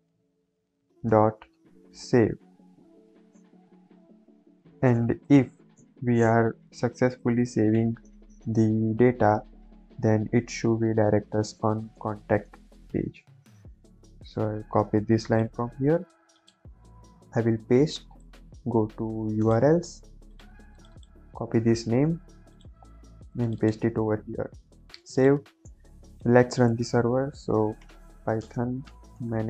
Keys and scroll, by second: 0.4 Tab, 1.0-2.8 typing, 3.5 ctrl+s, 9.6 Return, 15.6 ctrl+c, 16.7 ctrl+v, 17.2 ctrl+s, 21.4 ctrl+c, 24.0 ctrl+v, 24.2 ctrl+s, 26.2 ctrl+`, 27.5-29.4 typing.